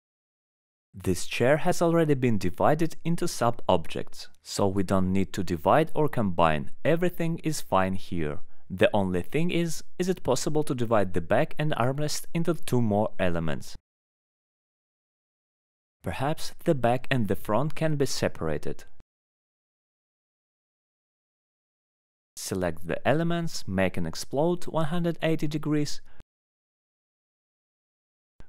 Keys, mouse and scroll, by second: 0.8 alt+middle click, 1.1 middle click, 2.5 alt+middle click, 3.4 alt+middle click, 3.8 click, 4.1 alt+middle click, 4.5 click, 7.1 alt+middle click, 7.7 alt+middle click, 10.0 click, 12.7 click, 13.7 click, 13.9 middle click, 14.7 click, 14.7 middle click, 17.1 click, 17.1-17.5 scroll down 3, 18.7 click, 21.3 click, 23.3-23.8 scroll, 24.0 click, 24.4 click, 25.0 middle click, 25.7 right click, 25.9 click, 27.7 right click, 27.8 click.